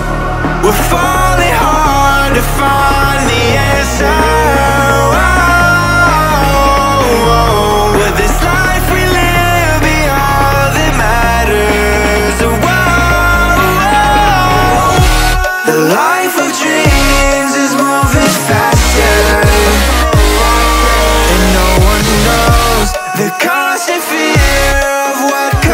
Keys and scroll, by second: 0.2 Down, 1.3 Return, 4.2 space, 9.6-13.6 typing, 9.9 Caps_Lock, 14.7-15.7 typing, 16.8 2, 18.8 x, 20.3 5.